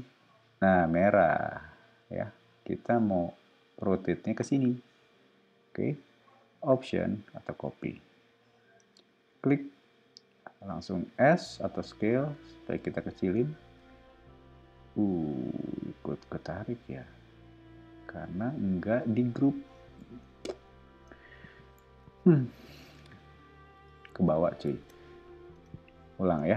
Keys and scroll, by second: 11.1 s, 20.0 o, 21.8 super+z, 24.7 super+z, 25.5 space.